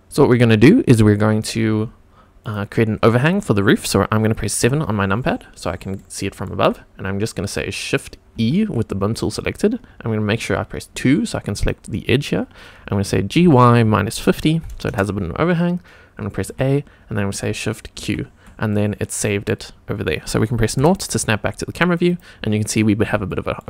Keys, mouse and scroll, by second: 2.4 click, 4.6 KP_7, 5.4 scroll up 1, 5.9-6.4 shift+middle drag, 8.3 shift+e, 10.9 2, 11.5 click, 13.3 g, 13.8 KP_Subtract, 14.1 KP_5, 14.2 KP_0, 14.8 Return, 16.4 a, 18.0 shift+q, 18.7-19.4 middle drag, 20.8 KP_0, 22.0 click, 23.3 shift+middle drag.